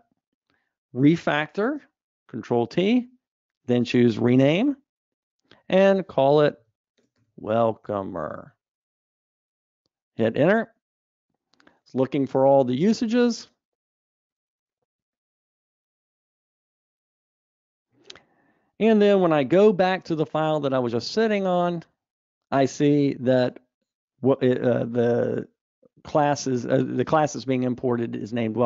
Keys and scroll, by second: 1.4 ctrl+alt+t, 21.0 super+e.